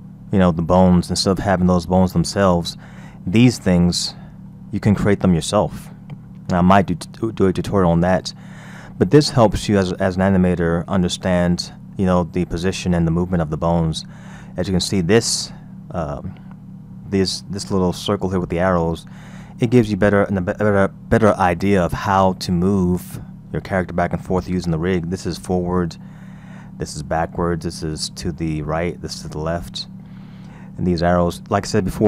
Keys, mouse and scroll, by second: 0.3-2.4 middle drag, 2.4-2.8 scroll down 3, 3.0-3.7 middle drag, 3.7-4.0 scroll down 2, 4.5-7.5 middle drag, 7.9-9.5 scroll down 3, 10.3-13.6 scroll up 2, 13.6-14.8 scroll down 2, 26.0-29.5 middle drag, 29.5-30.3 scroll up 6, 30.3-32.0 middle drag.